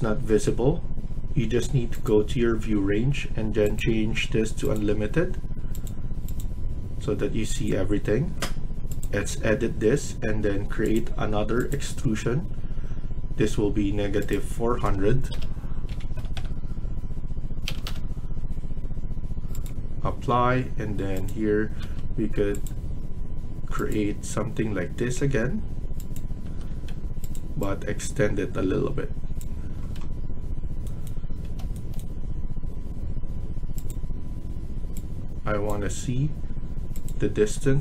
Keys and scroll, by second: 15.2-16.0 typing, 17.6 BackSpace, 17.7 BackSpace, 21.7 Escape, 26.4 Escape, 26.6 Escape, 29.7 Escape, 31.2 Escape.